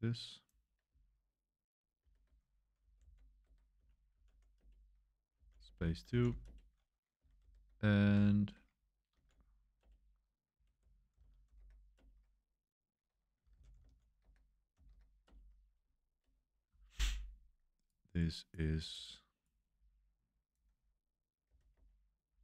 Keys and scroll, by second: 2.0 super+3, 2.8 i, 3.0 super+v, 3.4 Escape, 3.9-6.7 typing, 7.4 super+3, 7.9-11.9 typing, 13.1-15.2 typing, 21.7 super+1.